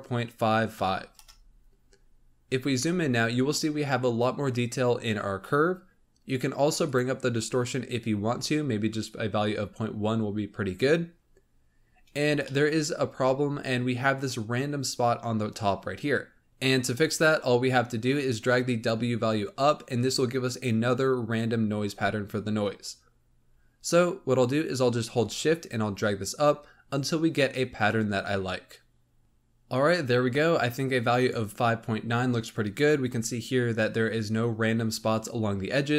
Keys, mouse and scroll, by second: 2.3-5.8 scroll up 6, 6.7-8.0 drag, 8.0 scroll down 2, 9.8 scroll down 2, 10.6-11.1 scroll down 2, 11.1-12.4 scroll up 5, 12.4-13.3 shift+middle drag, 13.3-13.7 scroll up 2, 16.4-18.1 scroll down 2, 23.2 scroll down 2, 25.2-28.2 shift+drag, 32.9-34.5 scroll down 1, 34.5-35.9 scroll up 1.